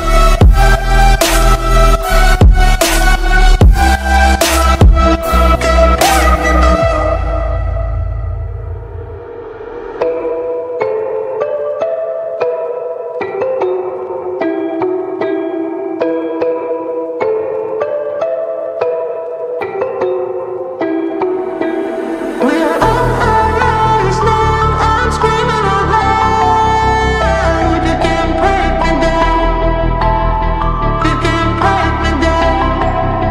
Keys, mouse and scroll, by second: 2.8 Left, 3.7 click, 4.0 scroll up 1, 4.9 click, 7.0 shift+Page_Up, 7.4 scroll up 1, 8.0 click, 8.2 scroll down 1, 8.9 click, 9.8 shift+click, 10.8-13.6 drag, 11.7-12.4 drag, 13.6 scroll down 2, 13.9 ctrl+z, 14.7-16.2 scroll up 2, 16.2-19.8 drag, 20.5-20.9 scroll down 1, 21.0 scroll up 1, 21.9 click, 23.2 ctrl+z, 24.2 scroll down 1, 25.0 click, 25.3-25.6 scroll up 1, 26.2 click, 29.3 Return, 30.8 click, 31.5 scroll up 1, 32.1 scroll down 1.